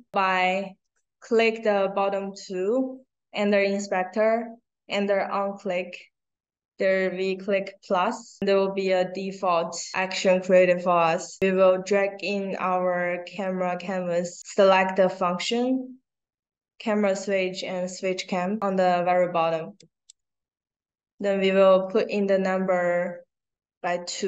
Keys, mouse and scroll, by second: 8.3 click, 11.4-13.4 drag, 19.7 click, 21.1 click.